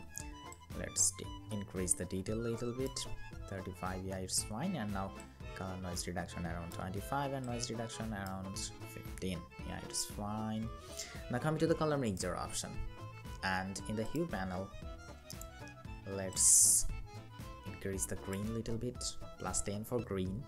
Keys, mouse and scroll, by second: 2.7 Up, 8.2 Up, 8.5 Up, 10.1 scroll down 1.